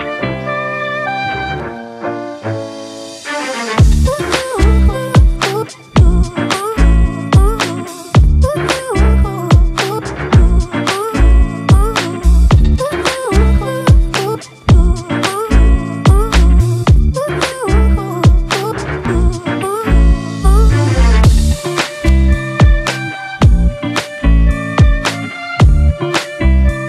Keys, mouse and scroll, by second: 3.1 double click, 7.9 double click, 20.1-20.5 typing, 22.9 typing, 25.3 typing.